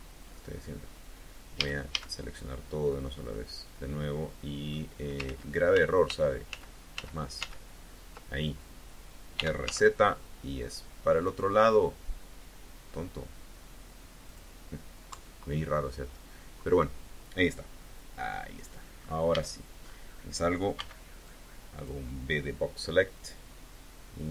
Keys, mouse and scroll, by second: 1.4 a, 2.7-4.7 drag, 5.1 ctrl+z, 9.2 r, 9.5 z, 14.1 click, 14.9 KP_3, 18.1 click, 19.1 a, 19.7-20.0 scroll up 1, 20.6 b, 21.1 click.